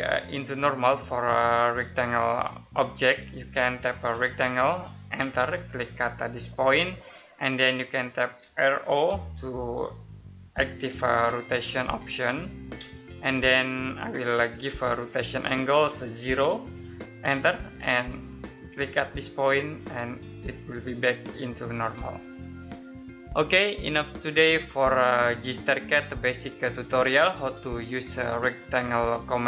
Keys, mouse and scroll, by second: 2.4-2.7 scroll down 1, 3.0 middle click, 3.5-5.1 typing, 6.4 click, 8.3-8.8 typing, 12.7 space, 16.2 0, 17.2 space, 18.6 click.